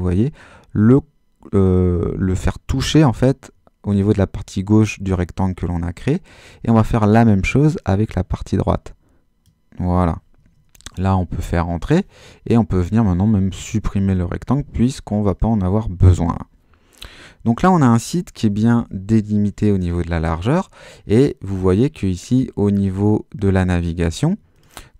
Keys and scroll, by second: 18.5 super+-.